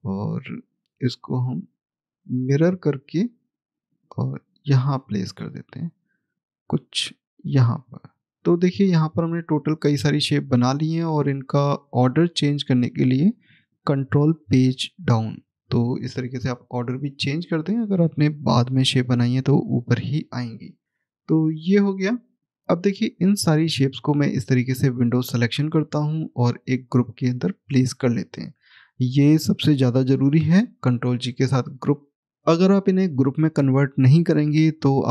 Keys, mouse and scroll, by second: 0.2 middle click, 1.1 click, 1.9 right click, 2.4 click, 9.8-11.9 scroll up 1, 11.9 click, 17.3 click, 20.8-22.2 scroll down 1, 22.3 click, 23.2 click, 31.6 click, 34.1 click.